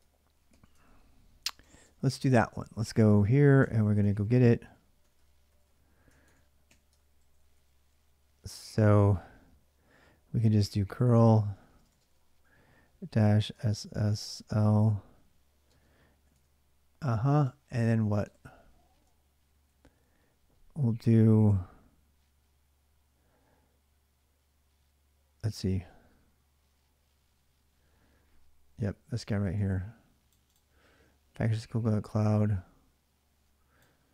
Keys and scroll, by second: 0.0-7.2 typing, 2.0 ctrl+[, 2.0 ctrl+j, 4.0 ctrl+j, 6.7 Return, 8.6 Return, 8.6 `, 10.1-15.4 typing, 17.2-19.5 typing, 19.3 ctrl+a, 19.5 ctrl+a, 23.8-24.5 typing, 33.9-34.1 typing.